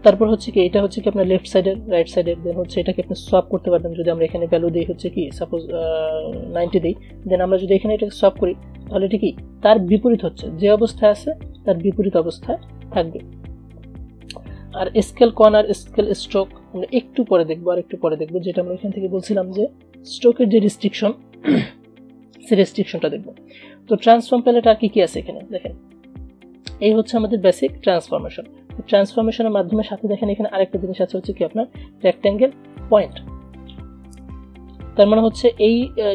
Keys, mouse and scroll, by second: 4.3 click, 6.7 click, 23.0 click, 25.4 scroll down 1, 32.2 click.